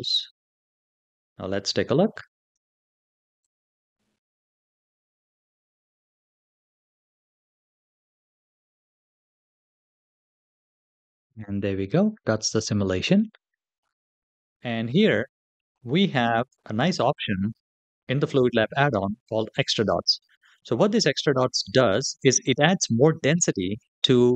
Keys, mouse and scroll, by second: 3.2 click, 13.8 click, 13.8 scroll down 2, 23.4 click.